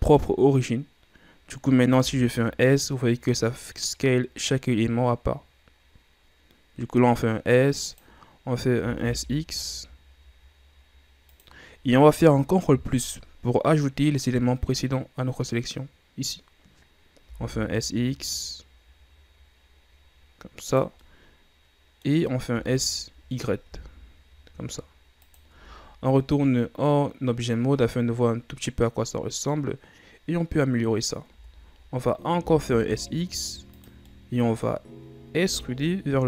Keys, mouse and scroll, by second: 2.2 s, 9.0 s, 12.9 ctrl+KP_Add, 14.6-15.5 scroll down 1, 16.7-17.5 scroll up 1, 17.5 s, 21.2-22.7 middle drag, 22.7 s, 26.0 scroll down 2, 26.3-29.4 middle drag, 30.4-31.5 scroll up 2, 31.5 Tab, 32.6 s, 34.3-35.7 middle drag, 35.7 e.